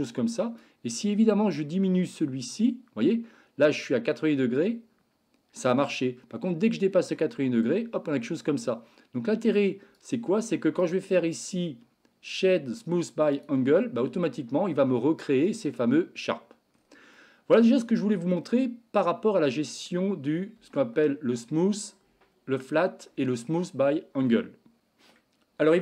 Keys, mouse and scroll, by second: 0.6-9.6 drag, 10.7 click, 11.4-13.4 right drag, 14.0 Tab, 14.6 middle click, 17.2 middle click, 18.3 shift+middle click, 19.3 middle click, 20.5 Tab, 24.8 middle drag.